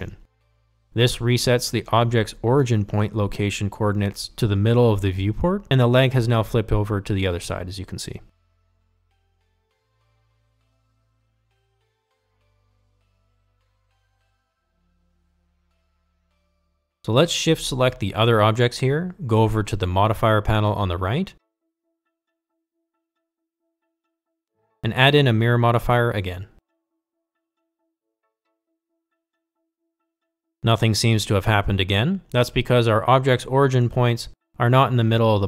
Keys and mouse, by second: 0.9 ctrl+a, 15.1 click, 19.7 shift+click, 28.8-31.0 drag.